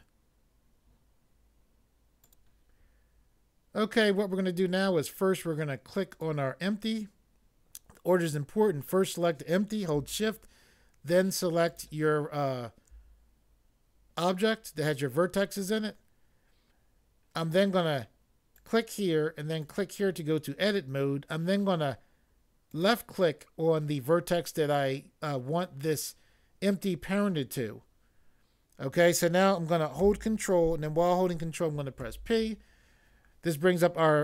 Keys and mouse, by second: 2.2 click, 6.0 click, 11.6 shift+click, 18.6 click, 19.6 click, 22.7 click, 32.0 ctrl+p.